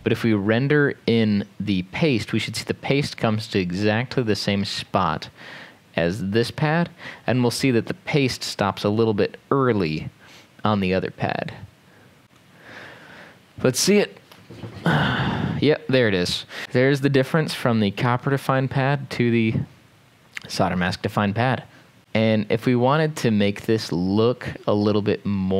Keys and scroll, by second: 0.2 ctrl+s.